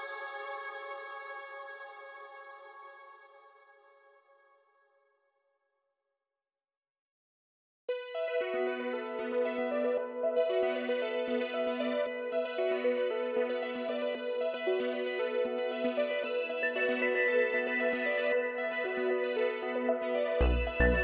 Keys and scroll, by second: 19.0 ctrl+z.